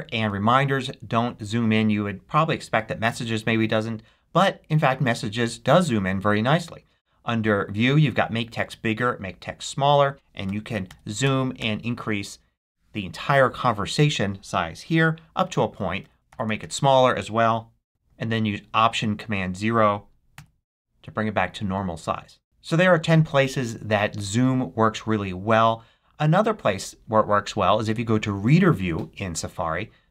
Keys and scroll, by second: 17.4 shift+super+-, 20.2 alt+super+0.